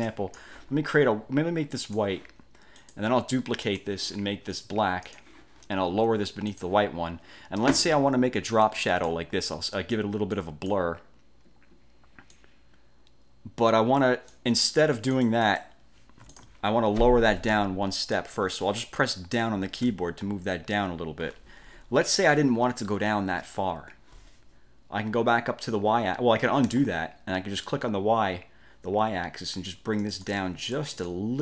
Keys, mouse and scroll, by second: 0.2 click, 2.0 click, 3.0 click, 3.8 click, 5.2 click, 6.6 click, 8.8 click, 9.6 click, 10.5 click, 12.4 click, 14.4 click, 15.2-15.9 drag, 16.4 alt+click, 20.0 Down, 22.0 ctrl+scroll up 2, 23.2 ctrl+scroll up 2, 26.8 ctrl+z, 30.1 click, 30.8 click.